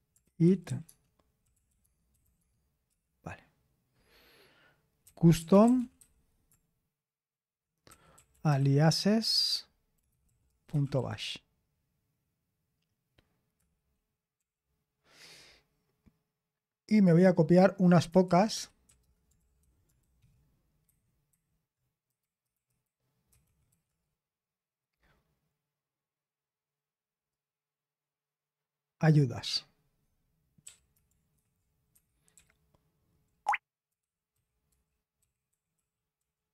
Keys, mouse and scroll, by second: 0.0-3.4 typing, 5.1-6.1 typing, 7.6-11.6 typing, 13.3-14.8 typing, 18.3-19.3 typing, 19.4 ctrl+p, 19.6 ctrl+a, 20.0 alt+f, 20.1 alt+f, 20.9 alt+b, 21.3 alt+b, 21.3-24.2 typing, 22.0 Delete, 22.6 Delete, 27.3-29.4 drag, 31.3 ctrl+v, 31.3-36.5 typing, 31.9 Escape.